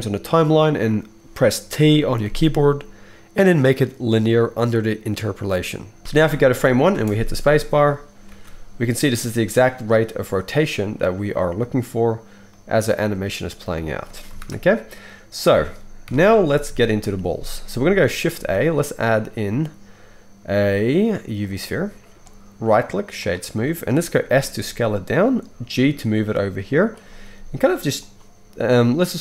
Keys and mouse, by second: 1.8 t, 6.0 shift+Left, 6.9 space, 8.3 alt+a, 14.0 space, 14.4 shift+Left, 16.0 KP_1, 18.3 shift+a, 22.6-25.3 middle drag, 24.2 s, 25.3-28.1 right drag, 25.6 g, 27.3 s, 28.1-28.8 middle drag, 28.8-29.2 drag.